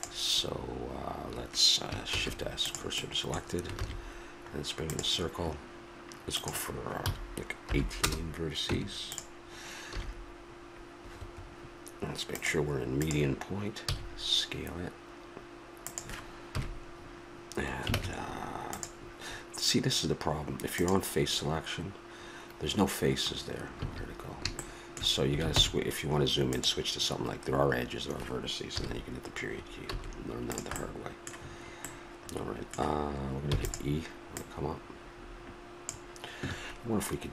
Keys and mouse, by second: 2.1 shift+s, 6.4-8.1 drag, 8.7 Tab, 9.9 s, 12.3-14.3 drag, 13.9 s, 16.5 KP_Decimal, 18.0 ctrl+Tab, 20.8-22.7 drag, 23.2-25.6 middle drag, 23.8 a, 25.6 ctrl+Tab, 28.7 KP_Decimal, 29.9 s, 32.0 middle click, 33.6 e, 34.3-36.2 drag.